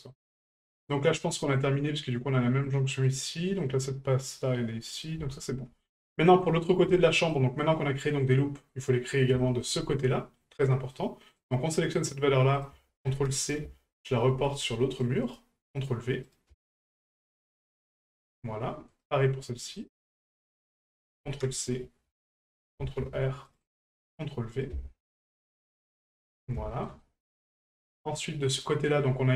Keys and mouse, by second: 0.1-1.5 middle drag, 2.6 middle click, 3.6-5.0 middle drag, 5.4 shift+middle drag, 5.8-6.4 middle drag, 7.1 middle drag, 8.3-8.7 middle drag, 9.4 shift+middle click, 9.9 middle click, 10.7 middle click, 11.4 right click, 12.6 ctrl+click, 16.2-17.5 drag, 18.9 right click, 19.8 right click, 20.7-21.8 ctrl+drag, 24.7 ctrl+click, 26.0 middle click, 26.7 shift+middle click, 27.0 middle click, 27.8 middle click.